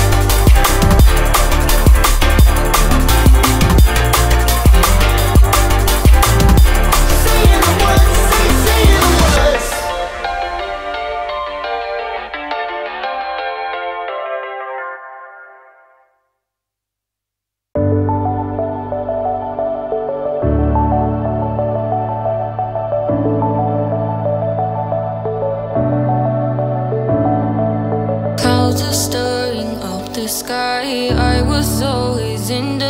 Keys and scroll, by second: 23.4 ctrl+t.